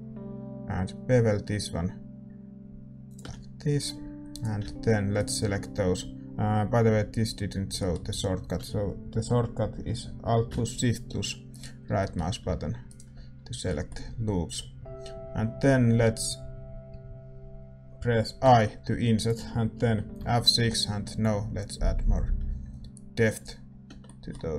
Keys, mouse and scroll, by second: 4.3-7.7 drag, 5.1-7.7 right drag, 7.7-11.5 middle drag, 8.4 a, 11.5-18.4 right drag, 11.9-18.4 middle drag, 18.4 i, 21.2 F6, 23.6 middle click, 23.8 Tab.